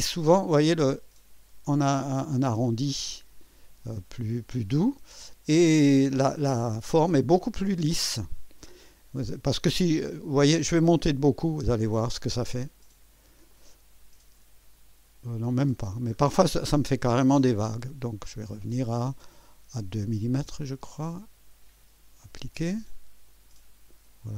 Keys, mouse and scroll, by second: 0.3-1.1 drag, 2.7-4.2 drag, 4.8-6.9 drag, 7.5-10.1 drag, 11.2-11.6 scroll up 2, 12.8 click, 13.5-16.7 drag, 16.9 click, 18.4-19.0 scroll down 3, 19.2 scroll up 2, 21.2 scroll down 2, 23.2 click.